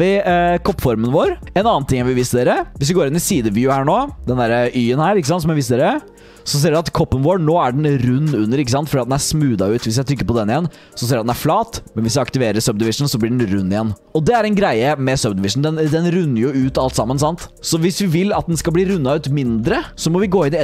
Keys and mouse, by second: 0.3-1.2 middle drag, 1.6 shift+drag, 1.8 middle click, 2.0 click, 2.7 KP_1, 5.1 shift+drag, 9.5 click, 12.5 click, 19.6 Tab, 19.9 Tab.